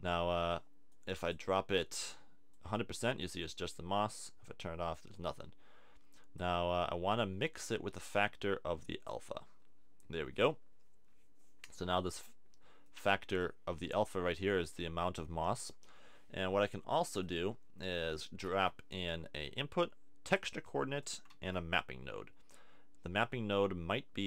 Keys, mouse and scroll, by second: 4.5-5.9 middle drag, 7.9-10.4 drag, 18.4 shift+a, 21.3 shift+a.